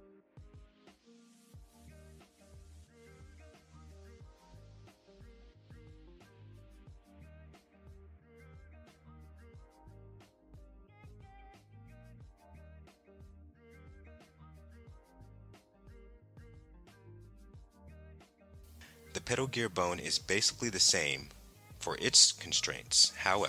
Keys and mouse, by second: 4.6 click, 5.8-6.8 drag, 7.6 click, 9.7-14.4 drag, 18.1 click, 20.0-21.5 drag, 22.9-23.4 drag.